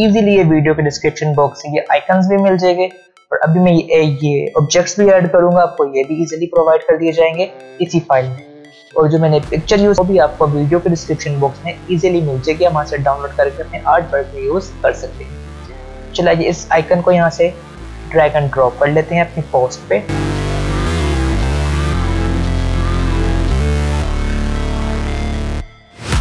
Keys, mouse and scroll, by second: 15.9 click, 20.1 alt+scroll up 1, 20.1 click, 20.4 click, 20.5 space, 20.7 space, 20.8 space, 20.9 click, 21.4 shift+Left, 21.7 click, 21.8 alt+scroll up 1, 21.9 click, 22.1-25.3 typing, 22.1 click, 22.6 alt+scroll up 1, 23.6 click, 24.1 click, 24.3 alt+click, 24.5 shift+click, 24.7 alt+click, 24.9 right click, 25.4 ctrl+g, 25.5 click, 25.6 alt+scroll down 1, 25.9 click, 26.1 alt+scroll up 1.